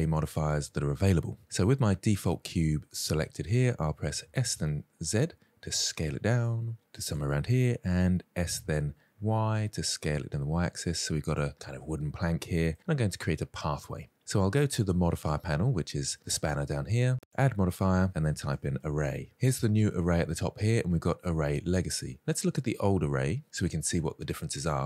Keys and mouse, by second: 2.3-3.0 middle drag, 3.7 s, 3.9 z, 7.9 s, 9.0 y, 11.4-12.6 middle drag, 17.3-24.5 drag.